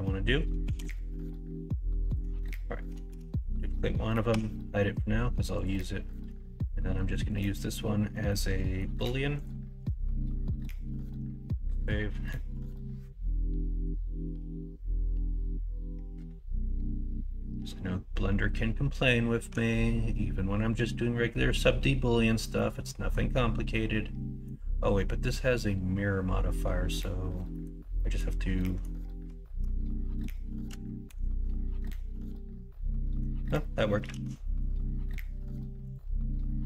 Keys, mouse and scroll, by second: 0.6 s, 2.4 Tab, 3.1 shift+d, 4.3 h, 6.0 middle drag, 7.1 middle drag, 8.2-8.7 middle drag, 11.0 ctrl+s, 22.5-23.1 middle drag, 23.7-24.4 middle drag, 27.5 middle drag, 27.9 middle drag, 28.6 middle drag, 31.1 ctrl+KP_Subtract, 31.9-33.2 middle drag, 33.6 middle click, 34.1 alt+z, 34.4 middle click, 35.0-35.5 middle drag, 36.4 middle click.